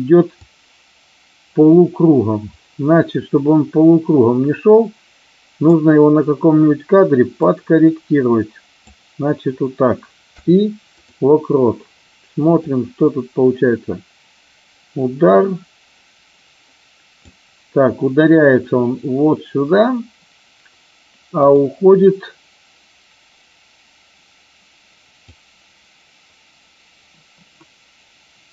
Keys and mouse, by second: 0.5-5.6 drag, 7.5-8.8 drag, 12.6-17.2 drag, 25.2-28.5 drag.